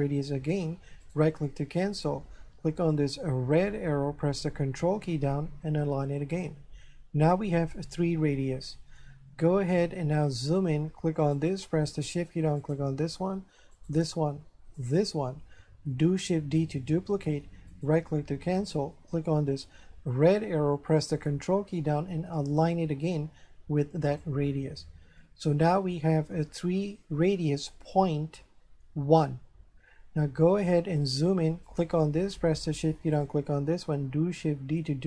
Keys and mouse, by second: 1.0 right click, 2.9 click, 4.3 ctrl+click, 9.0 shift+middle click, 11.2 right click, 12.6 shift+right click, 13.7 shift+right click, 15.3 shift+right click, 16.5 shift+d, 17.7 right click, 19.3 click, 21.0 ctrl+click, 25.2 shift+middle click, 31.7 right click, 33.2 shift+right click, 34.6 shift+d.